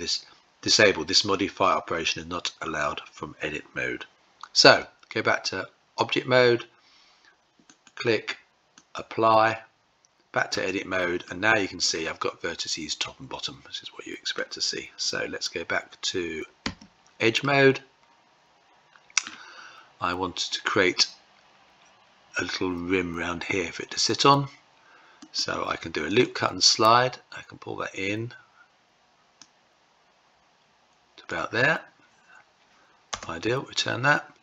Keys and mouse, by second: 4.2 Tab, 7.2-8.5 drag, 10.1 Tab, 10.8-13.9 middle drag, 16.2 2, 16.9-18.8 middle drag, 24.8-33.9 right drag.